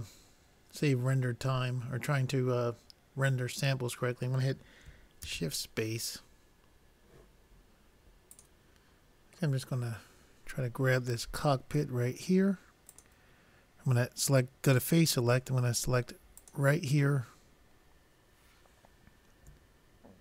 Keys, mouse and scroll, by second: 0.2 click, 0.9 z, 1.2 click, 6.1 shift+space, 10.3-11.7 middle drag, 12.9 click, 13.9 click, 15.2-16.5 drag, 16.8-18.4 drag.